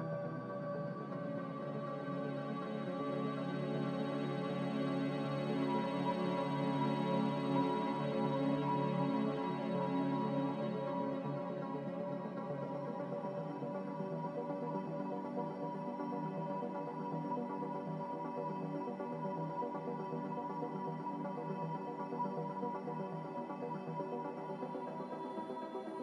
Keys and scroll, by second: 2.2 typing, 2.5 Return, 4.8 typing, 5.1 Return, 13.6 9, 13.7 5, 13.9 Return, 22.8 9, 23.2 6, 23.4 Return.